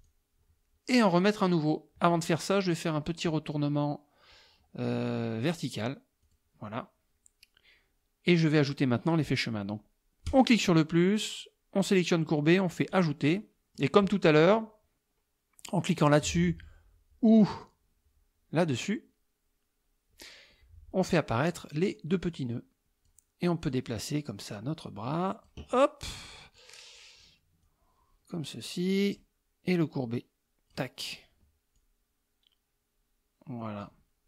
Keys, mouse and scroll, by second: 0.0 click, 6.3 click, 10.3 click, 11.9 click, 12.9 click, 13.4-14.0 drag, 17.6 click, 21.5 click, 22.4 click, 23.7-25.7 drag, 26.6 click, 27.7-29.4 drag, 29.9 click, 31.8-34.1 drag.